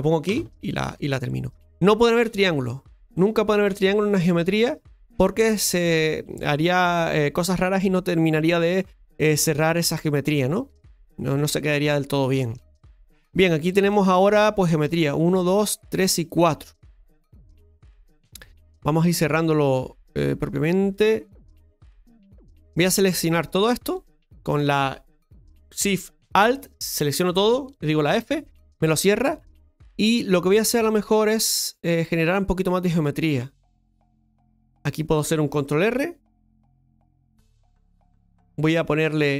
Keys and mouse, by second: 10.8-12.6 shift+middle drag, 13.9 shift+middle click, 22.7 right click, 24.4 right click, 26.5 alt+shift+right click, 26.7 alt+shift+right click, 30.7-32.0 shift+middle drag, 35.9 ctrl+r, 39.0 click.